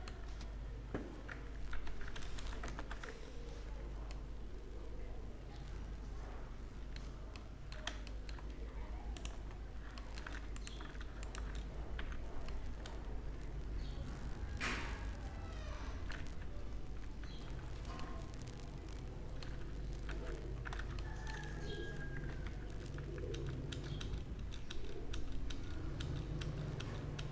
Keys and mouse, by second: 4.4 ctrl+n, 4.4 a, 7.2-10.2 middle drag, 10.2-12.4 drag, 11.9 h, 12.7 click, 13.2 middle click, 17.2 alt+h, 18.0-20.0 middle drag, 20.0 alt+h, 21.2-23.2 middle drag, 22.4 ctrl+z, 22.7 ctrl+z, 23.2 ctrl+z, 23.6 ctrl+z, 23.9 ctrl+z, 24.2 ctrl+z, 24.6 ctrl+z, 25.0 ctrl+z, 25.4 ctrl+z, 25.9 ctrl+z, 26.3 ctrl+z, 26.7 ctrl+z, 27.1 ctrl+z.